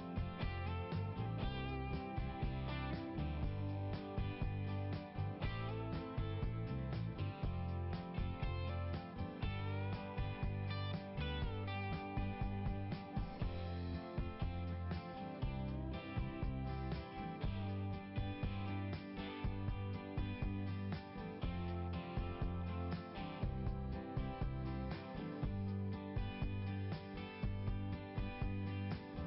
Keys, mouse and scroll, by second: 0.2 click, 2.9 click, 7.7 click, 7.9 click, 10.9 click, 15.6 click, 19.4 click, 23.8-24.9 scroll up 1, 24.9 right click, 26.1 click, 27.7 click.